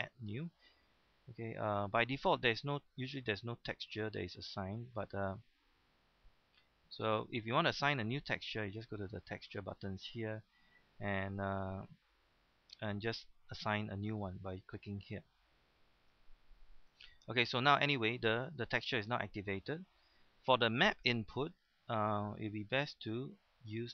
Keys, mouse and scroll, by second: 1.1-2.3 middle drag, 3.8 click, 6.4 middle click, 9.6 click, 13.3-14.5 middle drag, 16.0 click, 16.9 middle click, 21.4-23.9 drag.